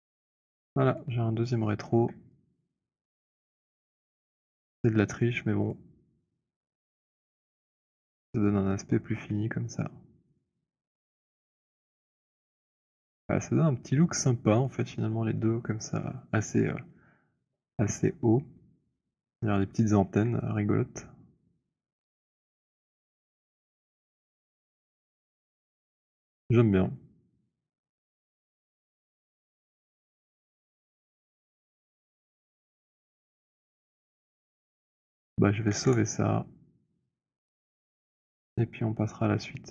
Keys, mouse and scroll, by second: 0.0 alt+click, 1.0 click, 1.6 middle click, 2.4 scroll, 3.4 alt+click, 5.7 click, 8.1 alt+click, 9.0 alt+click, 9.9 alt+right click, 10.3 click, 14.5 alt+click, 19.2 click, 21.6 alt+click, 23.1 alt+click, 33.9 alt+click, 34.6 scroll, 35.8 ctrl+s.